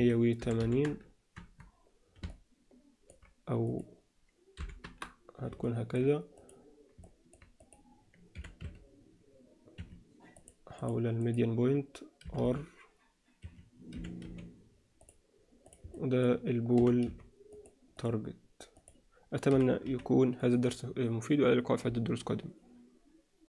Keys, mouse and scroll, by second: 2.3-3.1 middle drag, 3.6-5.1 drag, 5.6 alt+middle drag, 6.4 drag, 7.0 alt+middle click, 7.6 drag, 8.4 r, 10.4-11.3 drag, 13.9 r, 15.9 alt+middle drag, 16.8 g, 17.9 drag, 19.5 g.